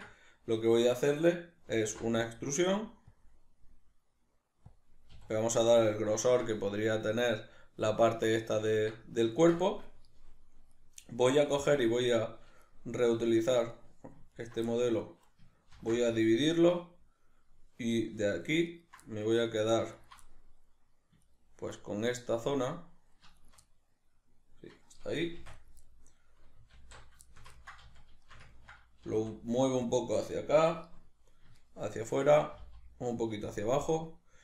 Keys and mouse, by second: 1.8 alt+e, 4.7 click, 5.1 a, 5.3-10.7 middle drag, 10.7 right click, 11.0-12.0 middle drag, 12.0 shift+right click, 12.7-13.7 middle drag, 13.7 right click, 14.3 ctrl+right click, 14.7-18.0 middle drag, 15.7 ctrl+r, 16.4 right click, 18.0 right drag, 18.7 ctrl+right click, 19.0 middle click, 20.0 ctrl+right click, 20.2-21.2 middle drag, 21.2 ctrl+right click, 21.8-23.4 middle drag, 23.4 shift+right click, 23.6-25.7 middle drag, 25.4 shift+d, 25.7 right click, 25.8-30.0 middle drag, 26.8 alt+q, 27.8 z, 29.0 g, 30.0 click, 31.6 shift+right click, 32.0 shift+right click, 32.6 g, 33.6 click, 33.9 right click.